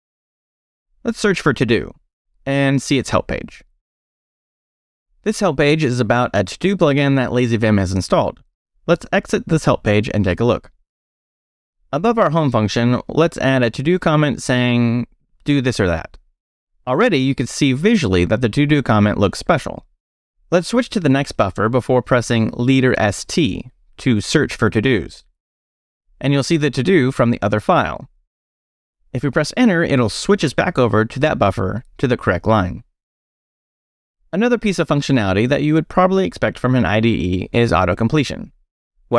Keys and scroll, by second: 0.0-2.2 typing, 4.5 Return, 8.6 Escape, 8.9-12.3 typing, 12.6 Return, 13.8-16.4 typing, 17.2 Return, 17.8 BackSpace, 18.5 Escape, 19.0-20.4 typing, 21.5-22.3 typing, 23.7 space, 24.4 s, 25.8 t, 29.7 Return.